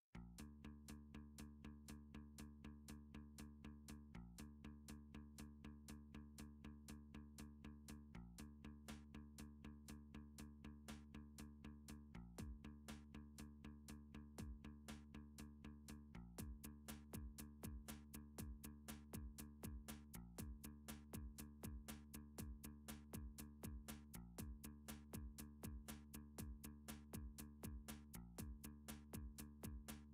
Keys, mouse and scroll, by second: 0.1 click, 0.3 Tab, 0.8 click, 1.0 Tab, 2.4 r, 3.6 click, 4.0 g, 4.4 z, 6.3 click, 8.6 middle click, 9.8 7, 9.9 middle click, 12.3 click, 12.3 d, 12.8 1, 14.1 r, 15.0 click, 15.7 middle click, 17.1 middle click, 17.4-17.8 typing, 19.0 click, 20.2 middle click, 20.3 middle click, 20.5 middle click, 20.6 g, 21.1 shift+middle click, 21.2 shift+middle click, 22.1 middle click, 22.4 3, 22.6-23.3 scroll, 23.8 scroll up 11, 23.9-24.2 shift+scroll, 24.6 scroll, 27.3 click, 28.8 click, 29.8 alt+z.